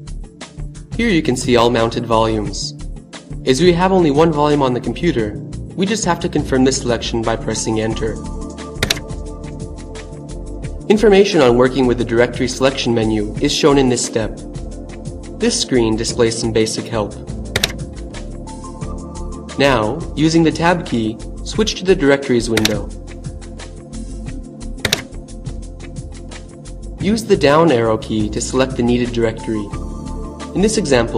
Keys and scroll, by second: 7.1 Return, 15.9 Return, 21.6 Tab, 23.7 Tab.